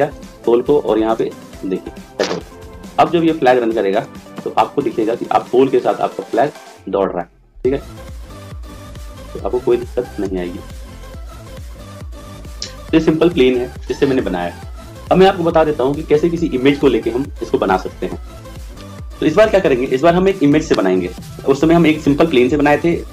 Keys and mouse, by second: 0.0 click, 3.8 click, 6.4-7.7 right drag, 11.2 right click.